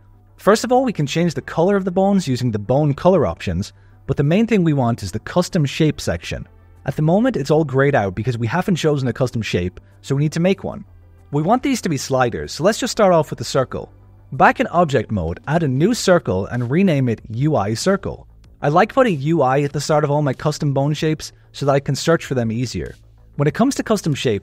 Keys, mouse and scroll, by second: 0.0 click, 0.6 click, 1.6 click, 2.2 click, 3.4 click, 4.1 click, 5.2 click, 11.1 alt+a, 11.8 shift+a, 13.0 click, 13.5 shift+a, 15.8 F2, 21.6-23.9 middle drag.